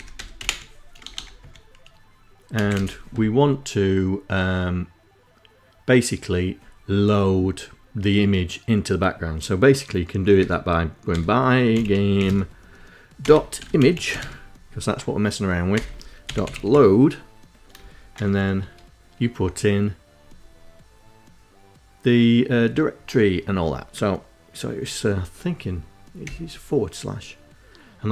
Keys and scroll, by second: 0.0-1.1 typing, 2.3 space, 2.4 =, 2.5 space, 10.1-14.4 typing, 15.4-18.6 typing, 26.0 /.